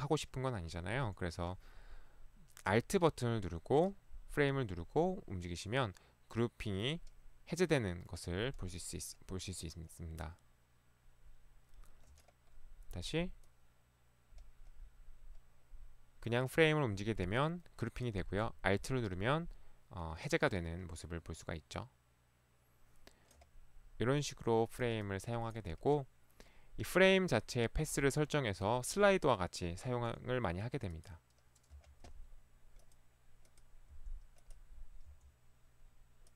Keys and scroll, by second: 31.8 Delete, 33.9 Delete, 35.1 Delete.